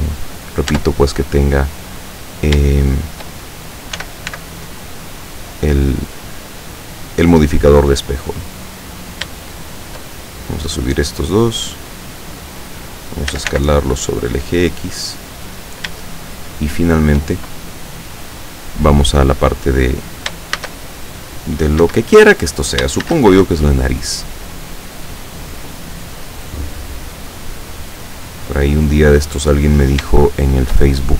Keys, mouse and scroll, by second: 0.7 Tab, 2.1 right click, 2.9 shift+right click, 4.0 s, 4.3 x, 7.3 click, 9.0 right click, 9.9 shift+right click, 10.5-12.8 drag, 13.4 s, 13.6 x, 15.5 click, 16.1-17.4 shift+middle drag, 20.7 shift+a, 21.9 Escape, 23.2 shift+a, 23.6 shift+click, 24.6-26.8 drag, 29.7 right click, 30.6 shift+right click.